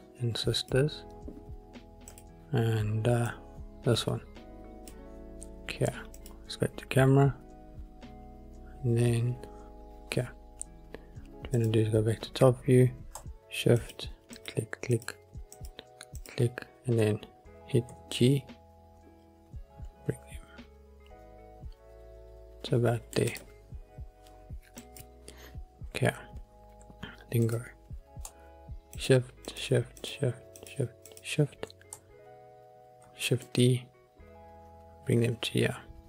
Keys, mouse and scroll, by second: 2.2 click, 3.4 click, 6.3 click, 11.7 click, 13.9 shift+click, 14.5 shift+click, 15.1 shift+click, 15.7 shift+click, 16.3 shift+click, 18.1 g, 18.3 middle click, 23.4 click, 23.4-24.9 scroll up 1, 24.9 click, 27.6 click, 29.1 shift+click, 29.6 shift+click, 30.1 shift+click, 30.7 shift+click, 31.2 shift+click, 33.2 shift+d, 33.6 middle click.